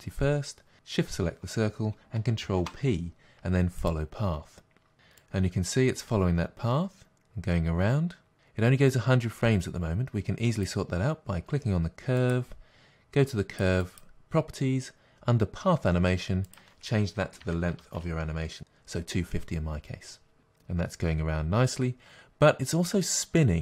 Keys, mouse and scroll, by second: 0.7 shift+click, 3.9 ctrl+p, 5.2-11.0 drag, 18.6 Return, 18.6-23.6 drag.